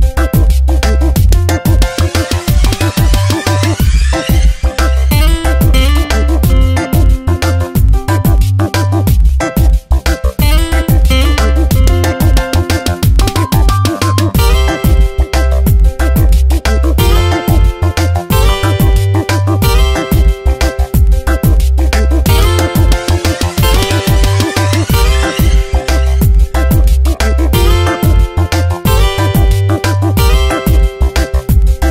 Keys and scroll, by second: 0.9 Return, 1.1 v, 1.4 shift+Right, 2.7 2, 4.5 Up, 4.9 shift+Right, 6.7 Tab, 11.4 i, 13.0 ctrl+shift+n, 13.2 Return, 13.6 alt+BackSpace, 15.9 e, 28.3 Tab, 29.4 space, 30.7 ctrl+1, 31.2 space.